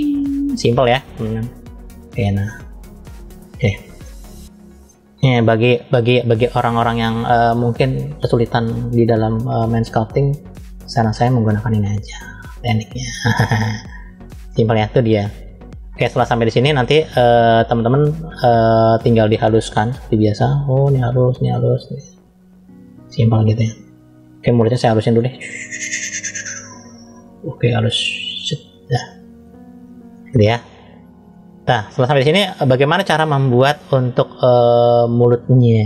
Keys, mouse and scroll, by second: 0.7 middle click, 1.7 click, 3.3-3.7 scroll up 1, 3.9 middle click, 4.8 shift+middle click, 5.8 middle click, 6.8 click, 13.0 middle click, 13.7-14.4 scroll down 2, 14.4 middle click, 15.5-15.9 scroll up 2, 16.0 shift+middle click, 17.1 middle click, 19.7 click, 20.4 click, 23.6-24.3 scroll down 2, 24.5 click, 31.6-32.4 scroll up 2, 32.4 scroll down 1, 32.5-33.1 scroll down 1, 33.1-34.5 middle drag, 33.1 scroll down 1, 34.6-35.0 scroll up 2.